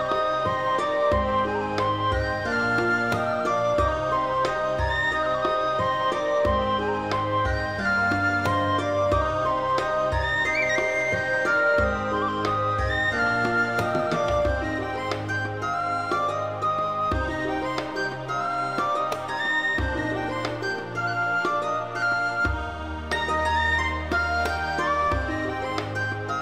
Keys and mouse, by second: 0.0-0.5 typing, 0.3 right click, 1.1 click, 1.5 click, 1.9 g, 2.4 click, 2.7 click, 2.8 g, 3.4 click, 3.5 middle click, 3.8 alt+z, 3.9 alt+middle click, 4.1 alt+middle click, 4.7 middle click, 5.2 3, 6.0 alt+middle click, 6.1 alt+middle click, 6.4 g, 7.8 right click, 8.2 middle click, 8.5 shift+click, 8.6 alt+middle click, 8.7 alt+middle click, 8.9 g, 9.0 middle click, 9.4 click, 9.6 middle click, 10.1 middle click, 10.3 g, 10.3 middle click, 10.8 click, 11.0 middle click, 11.2 1, 11.5 middle click, 12.0 middle click, 12.3 click, 12.5 alt+middle click, 12.6 alt+middle click, 12.8 alt+middle click, 13.0 middle click, 13.0 g, 13.7 click, 13.9 middle click, 14.2 click, 14.4 middle click, 14.5 middle click, 14.5 g, 14.8 right click, 14.9 g, 15.0 middle click, 15.4 click, 15.5 middle click, 16.0 middle click, 16.2 middle click, 16.2 g, 16.5 click, 16.8 middle click, 17.0 g, 17.0 middle click, 17.4 click, 17.5 middle click, 18.0 alt+middle click, 18.1 alt+middle click, 18.9 middle click, 20.3 shift+click, 20.5 alt+middle click, 20.7 alt+z, 21.0 shift+middle click, 21.3 shift+middle click, 21.5 g, 23.0 right click, 23.2 g, 23.4 click, 23.6 alt+middle click, 23.8 alt+z, 24.1 click, 24.2-26.4 typing, 24.6 click, 25.6 click, 25.9 click, 26.2 click.